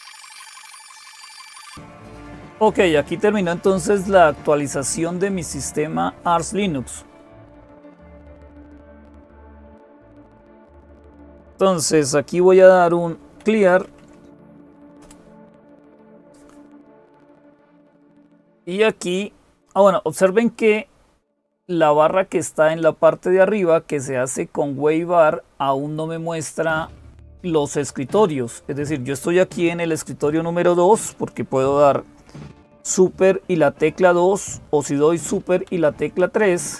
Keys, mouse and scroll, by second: 0.0-36.7 typing.